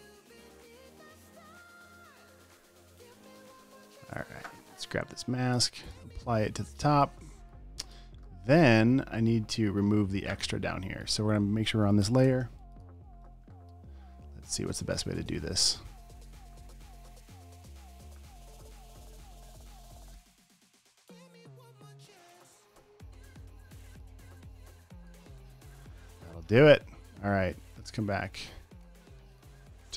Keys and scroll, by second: 3.3 Return, 3.5 v, 3.7 space, 4.3 super+space, 5.9 super+v, 7.4 v, 7.6 space, 8.1 space, 9.0 super+space, 10.7 space, 12.5 l, 12.9 space, 13.4 space, 13.5 space, 17.1-19.4 typing, 23.5-24.2 typing.